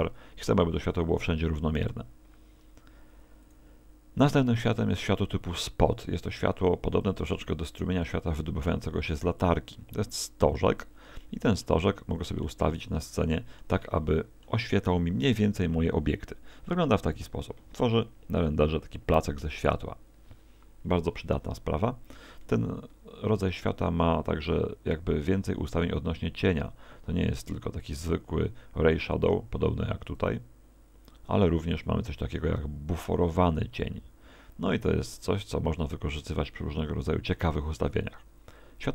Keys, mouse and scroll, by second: 3.5 click, 5.1 g, 7.1 click, 7.5 middle click, 8.4 middle click, 9.4 click, 11.2 middle click, 11.9 middle click, 12.7 middle click, 22.9 Escape, 30.1 click, 31.7 click.